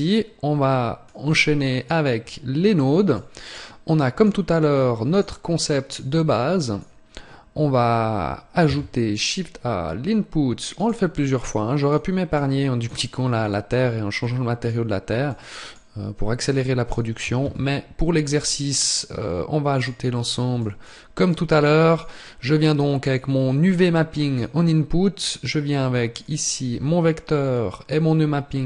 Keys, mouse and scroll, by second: 0.7 click.